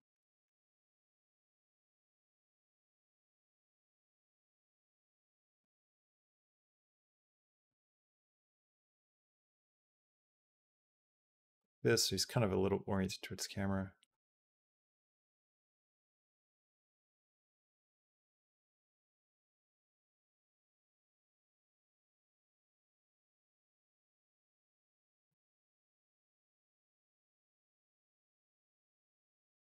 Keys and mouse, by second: 0.6 g, 2.6 click, 3.0 r, 5.4 r, 8.2 g, 13.9-22.8 drag, 23.6 Down, 24.3 Down, 24.8 Up, 26.0 g, 27.6 g.